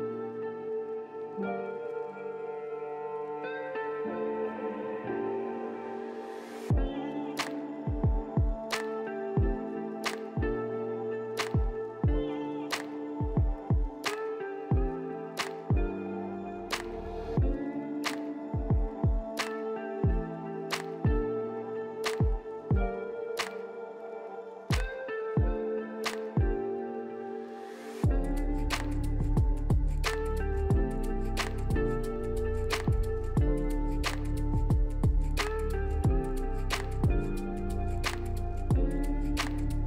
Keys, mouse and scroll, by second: 2.4 scroll up 1, 3.0-5.7 scroll down 2, 5.8 middle click, 38.9 right click.